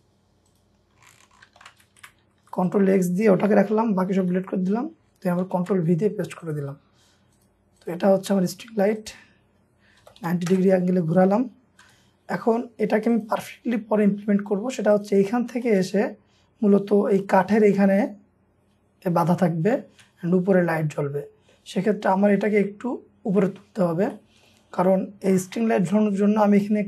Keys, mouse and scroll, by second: 1.5 ctrl+x, 2.1 Escape, 2.3 Escape, 2.4 Escape, 3.7 scroll down 1, 4.3 Delete, 5.5 ctrl+v, 5.8-7.8 ctrl+scroll up 2, 7.8 double click, 9.8-10.7 typing, 11.0-11.6 scroll up 1, 11.8 typing, 11.9-12.5 scroll up 1, 12.5-13.3 scroll up 4, 13.8-14.3 scroll down 1, 14.3-14.7 scroll up 1, 15.3 scroll down 1, 15.5 m, 15.7 shift+middle click, 16.2 scroll up 1, 16.9 middle click, 17.6-18.1 scroll down 1, 19.2 middle click, 19.8 middle click, 24.7-25.9 scroll down 1, 26.1-26.8 scroll up 1.